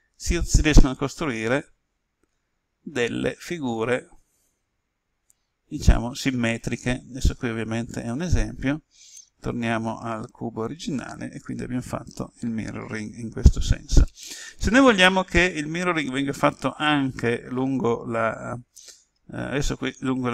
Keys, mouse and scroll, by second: 8.0 right click, 9.1 ctrl+z, 9.4 ctrl+z.